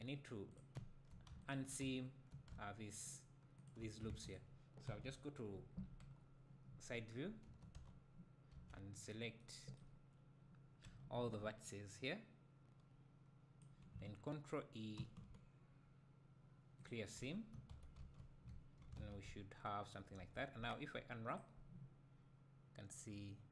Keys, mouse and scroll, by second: 0.5 click, 0.7 `, 1.4 shift+click, 1.8 `, 3.1 shift+click, 4.1 alt+a, 4.3 click, 4.9 KP_1, 5.5 scroll down 1, 6.0 KP_3, 6.4-7.0 scroll up 1, 7.4 1, 9.0 scroll down 1, 9.9-10.8 scroll down 1, 13.6 b, 16.9 ctrl+e, 17.7 a, 18.5 `, 19.0 alt+a, 19.3 `, 20.2 a, 21.4 u.